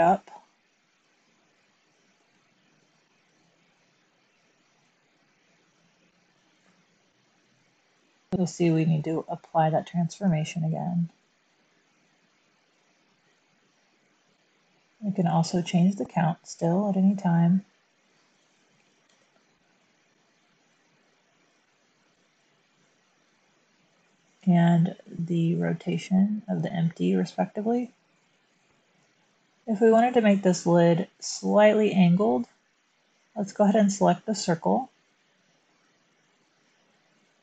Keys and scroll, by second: 0.0 g, 2.1 z, 10.1 super+a, 14.5 1, 18.7 typing, 19.0 Return, 24.2 typing, 24.8 Return, 27.5 typing, 28.5-28.9 typing, 29.0 Tab, 35.5 Tab.